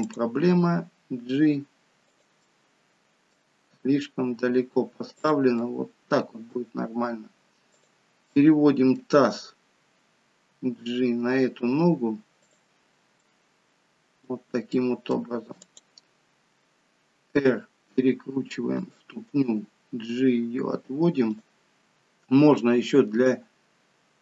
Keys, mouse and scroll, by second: 0.1 click, 0.5 g, 2.4 middle click, 3.6 g, 5.6 middle click, 7.8 click, 8.3 middle click, 10.6 g, 13.2 middle click, 14.7 middle click, 15.6 click, 17.4 r, 19.3 g, 21.8 click, 22.6 g.